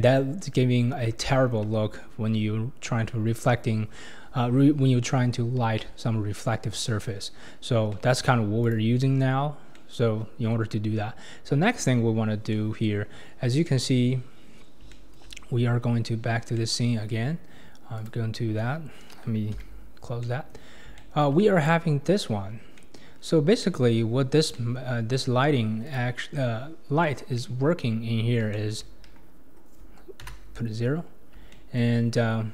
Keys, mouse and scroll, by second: 1.2-4.2 shift+middle drag, 7.9-8.6 middle drag, 8.6 click, 9.7-10.8 middle drag, 10.8-12.1 scroll up 1, 12.2-12.5 scroll down 2, 12.5-13.2 middle drag, 13.2-14.0 scroll up 6, 14.5-14.9 scroll down 4, 14.9 shift+middle click, 15.4-16.2 scroll up 11, 16.6-18.0 middle drag, 18.0 click, 19.6 n, 20.2 scroll down 1, 20.2-21.6 middle drag, 21.6 click, 22.0-22.8 scroll down 9, 22.8-23.2 middle drag, 23.2-23.6 scroll down 3, 23.6-26.0 middle drag, 26.0 click, 27.1 scroll up 3, 27.4-28.0 middle drag, 28.0 scroll down 2, 28.5-29.0 shift+middle drag, 29.0 KP_1, 30.2 KP_0, 30.9-31.3 scroll down 4, 31.5-32.0 shift+middle drag, 32.0 scroll down 3.